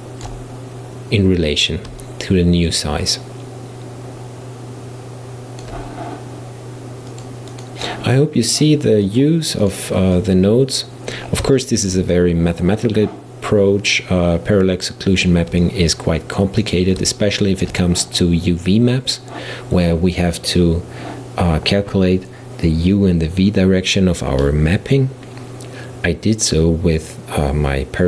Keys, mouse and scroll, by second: 7.1 click, 9.1 click, 9.7-11.4 drag, 11.4 scroll down 2, 11.6-14.6 shift+middle drag, 15.6-20.2 middle drag.